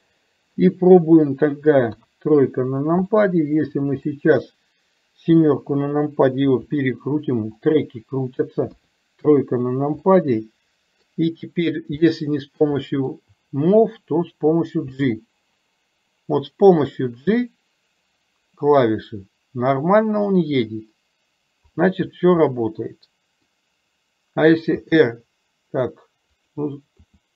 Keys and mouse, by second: 2.1 KP_3, 3.2 shift+middle click, 4.2 middle drag, 5.4 KP_7, 6.7 r, 8.8 KP_3, 10.1-11.2 middle drag, 12.2-12.8 shift+middle drag, 13.0 middle click, 14.9 g, 22.6-23.6 middle drag.